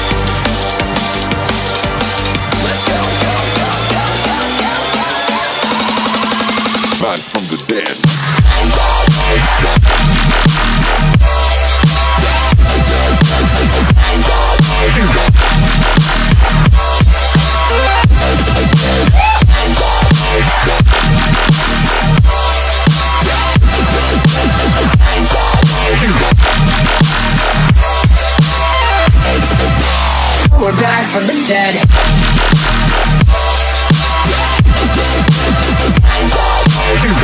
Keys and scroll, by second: 1.1 v, 3.0 super+g, 3.9 space, 4.4-5.5 alt+super+space, 9.1 m, 12.8 v, 15.7 shift+super+F5, 17.6 BackSpace, 18.6 space, 19.1 alt+super+space, 19.2 alt+super+space, 19.3 alt+super+space, 19.4 alt+super+space, 19.5-20.2 alt+super+space, 20.4 alt+super+space, 20.5 alt+super+space, 33.0 super+g, 34.9 super+c, 36.5-37.2 space.